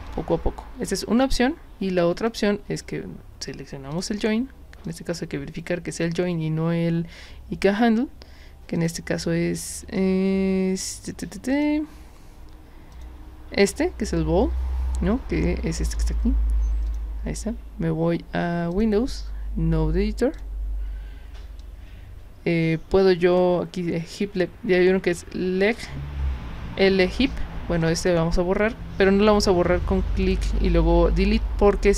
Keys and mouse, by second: 0.1 drag, 2.3 click, 3.9 drag, 4.8 click, 8.8 click, 11.5 click, 12.9 click, 16.9 click, 18.7 click, 20.3 click, 21.6-23.3 drag, 27.8 click, 30.2 click.